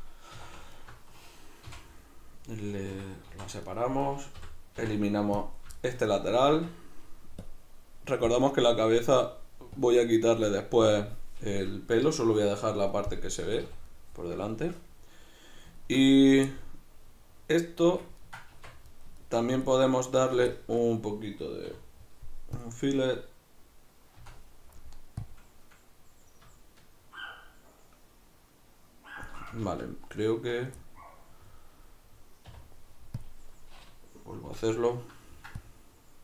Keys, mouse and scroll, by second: 0.4 2, 0.8 alt+right click, 1.7 x, 3.0 Escape, 3.3 v, 4.1 right click, 4.4 l, 5.8-7.4 shift+middle drag, 6.5 Tab, 7.4-13.2 drag, 13.2-16.2 middle drag, 13.4 a, 16.2 right click, 16.5-19.7 middle drag, 18.5 Tab, 19.7-20.3 right drag, 20.5-36.2 shift+middle drag, 21.7 w, 29.7 ctrl+z, 32.5 w.